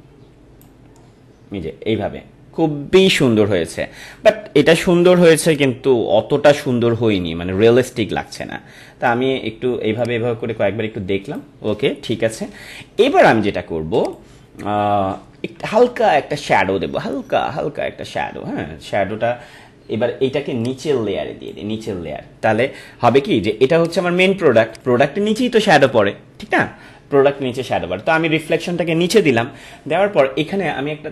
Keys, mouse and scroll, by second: 3.7 click, 3.9 ctrl+-, 8.3-13.9 drag, 14.0 click, 16.0 ctrl+=, 20.6-23.7 drag.